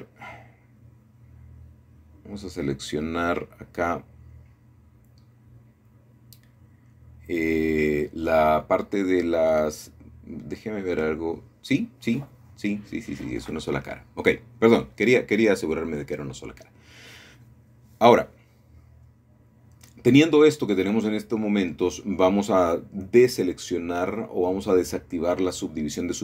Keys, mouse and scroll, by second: 0.0-1.6 middle drag, 1.2-2.1 scroll up 1, 2.5 middle click, 6.9 click, 7.8-8.8 drag, 10.0 middle click, 11.1 middle click, 12.7-13.8 middle drag, 15.5-16.7 drag, 16.8-17.3 scroll up 1, 17.3 shift+middle click, 18.3 shift+middle click, 18.7 middle click, 21.4-22.6 drag, 22.8 middle click, 23.1-23.6 scroll up 2, 23.6-25.2 shift+middle drag, 25.5 shift+middle click.